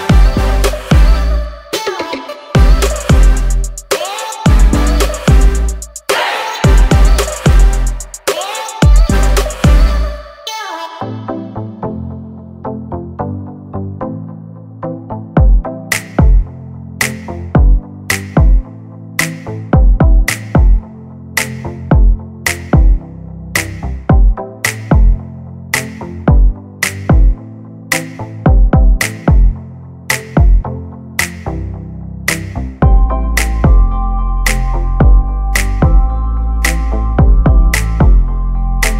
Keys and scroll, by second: 4.6 5, 5.0 Return, 5.5 space, 9.1 f, 10.6-11.8 typing, 12.8-14.4 typing, 15.9 5, 16.1 Return, 16.3 space, 21.7 r, 23.1 space, 23.4 p, 28.8 space, 29.5 m, 30.6 space, 30.9 p, 33.1 2, 33.4 Return, 37.8 space.